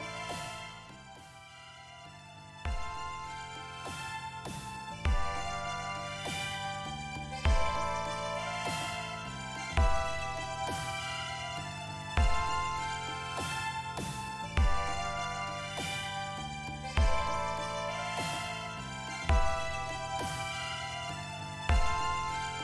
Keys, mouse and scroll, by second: 1.5 click, 3.4 click, 9.4 click, 11.1 click, 12.3-13.5 drag, 18.3 click, 19.8 r, 20.0 t.